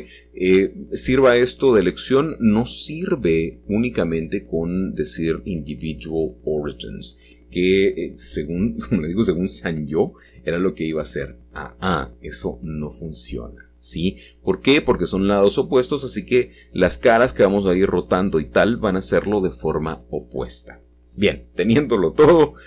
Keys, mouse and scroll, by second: 1.3 r, 4.9 Return, 6.4 g, 10.9-12.0 scroll up 1, 14.8-16.8 drag, 18.5 l, 20.6-22.6 shift+middle drag, 21.2-22.6 scroll down 2.